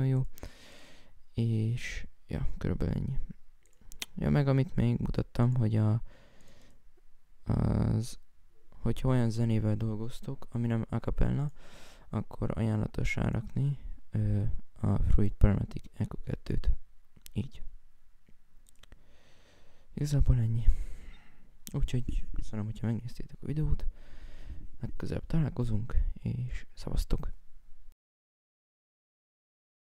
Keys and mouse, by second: 0.5 F1, 3.4 F1, 9.6 F1, 18.6 right click, 19.0 right click, 19.6 F1, 25.6 right click.